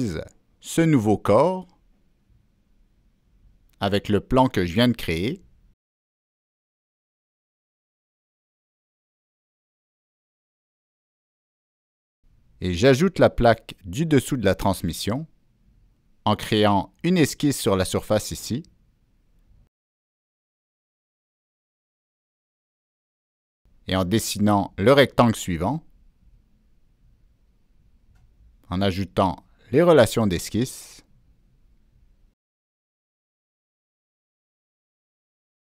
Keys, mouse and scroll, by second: 1.3 click, 2.7 click, 4.1 click, 4.8 click, 5.4 click, 6.1 click, 8.7 click, 14.5 middle click, 14.6 scroll up 1, 17.0 click, 18.0 click, 19.2 middle click, 21.0 click, 22.8 right drag, 25.1 right click, 25.1 scroll up 1, 26.0 click, 26.1 right click, 27.4 click, 28.3-28.6 scroll down 1, 31.3 click, 31.9 ctrl+click, 33.2 click, 33.7 scroll up 1, 34.4-35.1 scroll down 2.